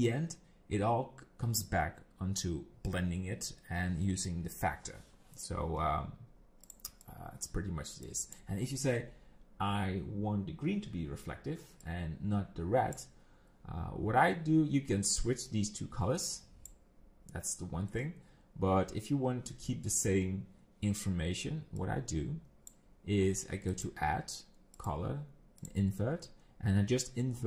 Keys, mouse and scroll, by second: 6.6 click, 7.1 click, 8.0 click, 11.8 click, 15.5 click, 21.8 click, 23.7 click.